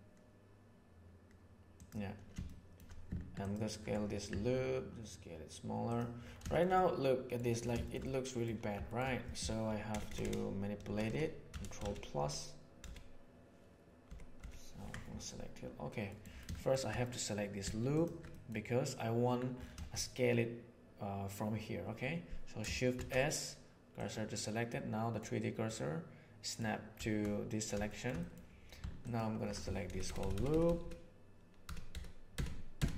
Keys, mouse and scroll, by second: 2.4 shift+middle click, 3.3 alt+click, 4.2 s, 6.7 middle click, 7.8 shift+middle click, 8.0 middle click, 8.8 shift+middle click, 9.8 ctrl+KP_Add, 10.0 ctrl+KP_Add, 10.2 ctrl+KP_Add, 10.8 ctrl+KP_Add, 11.0 ctrl+KP_Add, 11.4 ctrl+KP_Add, 11.8 ctrl+KP_Add, 12.1 ctrl+KP_Add, 12.8 ctrl+KP_Add, 14.0 ctrl+KP_Add, 14.3 ctrl+KP_Add, 16.0 middle click, 16.5 middle click, 17.8 alt+right click, 18.2 middle click, 22.9 shift+s, 24.7 middle click, 25.5-26.5 middle drag, 27.7 shift+middle click, 28.1 middle click, 29.0 alt+middle click, 29.8 ctrl+KP_Add, 30.0 ctrl+KP_Add, 30.1 ctrl+KP_Add, 30.3 ctrl+KP_Add, 30.4 ctrl+KP_Add, 30.6 ctrl+KP_Add, 30.7 ctrl+KP_Add, 31.6 ctrl+KP_Add, 31.8 ctrl+KP_Add, 32.3 ctrl+KP_Add, 32.7 ctrl+KP_Add.